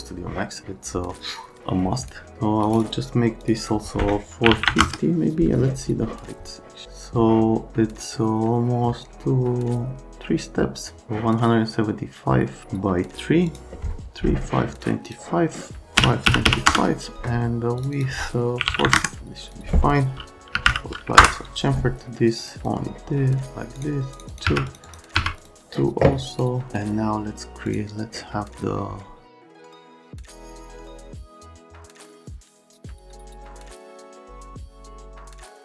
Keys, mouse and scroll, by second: 1.6 click, 2.3 click, 3.4 click, 3.6 click, 4.5 KP_4, 4.5 KP_5, 4.7 KP_0, 4.8 KP_Enter, 13.5 click, 16.0 KP_5, 16.3 KP_2, 16.4 KP_5, 16.7 KP_Enter, 17.8 click, 17.9 click, 18.6 KP_4, 18.6 KP_5, 18.8 KP_0, 18.9 KP_Enter, 19.4 click, 20.3-21.1 typing, 21.2 Return, 22.4 click, 22.6 click, 23.8 click, 24.1 click, 24.3 click, 24.5 2, 24.6 click, 24.8 click, 25.2 2, 25.4 click, 26.3 right click, 27.6 click, 29.6 click, 29.8 scroll down 1, 29.9 scroll up 1, 30.1 click, 30.4 click, 30.7 click, 30.8 click, 31.0 click, 31.2 right click, 31.3 click, 31.5 right click, 31.7 click, 31.9 click, 32.2 click, 32.4 click, 32.6 click, 32.7 right click, 32.9 click, 33.1 click, 33.2 right click, 33.4 right click, 33.6 click, 33.7 click, 34.1 click, 34.2 click, 34.4 middle click, 34.8 click, 35.0 click, 35.1 right click, 35.5 click.